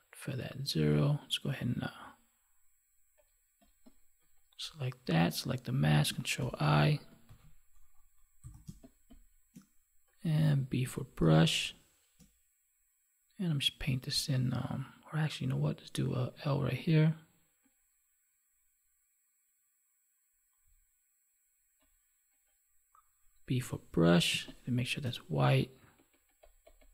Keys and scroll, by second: 6.4 ctrl+i, 7.2 ctrl+d, 8.6 space, 11.2 space, 24.3 space.